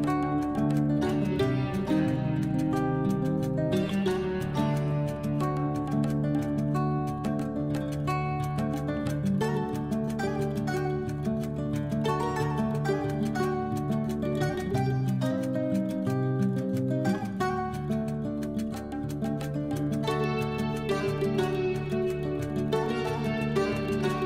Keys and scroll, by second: 10.9 ctrl+z.